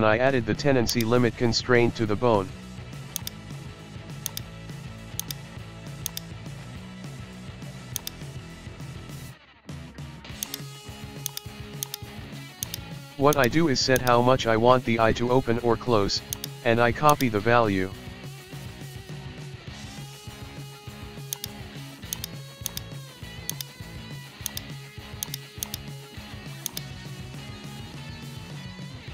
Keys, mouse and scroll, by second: 0.9-2.4 drag, 3.2-4.3 drag, 5.2 click, 7.2 alt+g, 8.0-9.5 drag, 10.4 click, 11.8 click, 13.4 click, 14.0 click, 15.2 alt+g, 16.3 click, 17.1-18.6 drag, 22.2 right click, 23.5-25.0 drag, 25.3 right click, 25.7-26.7 drag, 28.8-29.1 shift+middle drag.